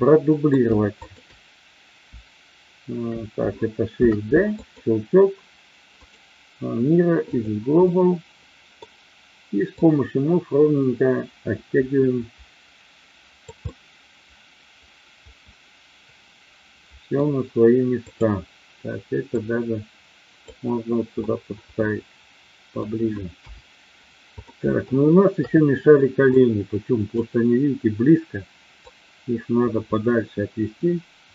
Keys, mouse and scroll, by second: 0.9 shift+click, 3.9 shift+d, 4.6 click, 5.9-7.4 right drag, 7.8 middle click, 9.7-13.4 drag, 13.6-17.1 middle drag, 18.1 click, 19.2-20.4 drag, 21.2-22.7 middle drag, 23.3 KP_1, 24.4 middle click, 25.4 KP_3, 26.3 click, 28.7-31.3 drag.